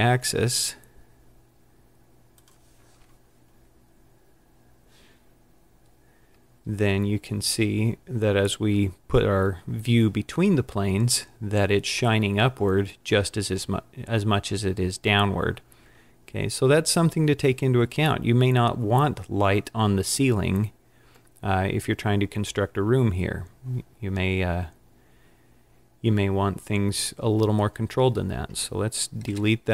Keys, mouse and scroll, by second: 3.6 click, 3.6-4.7 scroll down 6, 4.7-5.6 scroll up 8, 24.3-24.6 scroll up 5, 25.5 scroll down 2, 26.6-27.0 scroll down 2, 29.4 Delete.